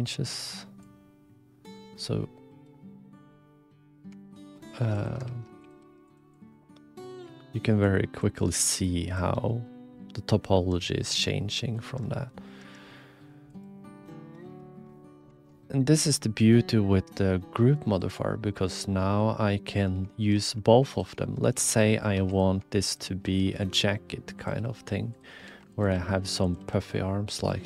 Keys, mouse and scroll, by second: 0.8 click, 1.8 middle click, 4.3 shift+f, 5.2 ctrl+f, 5.8 f, 6.3-7.8 drag, 8.2-9.2 drag, 9.5 click, 10.7 ctrl+z, 11.4 click, 12.0 ctrl+z, 12.6 ctrl+shift+z, 15.3 alt+z, 15.4 ctrl+alt+KP_1, 17.4 click, 18.8 click, 20.1 shift+middle click, 20.9 click, 21.2 shift+middle click, 21.8 middle click, 22.1 2, 23.2 s, 24.3 click, 24.5 g, 25.4 ctrl+r, 26.6 s.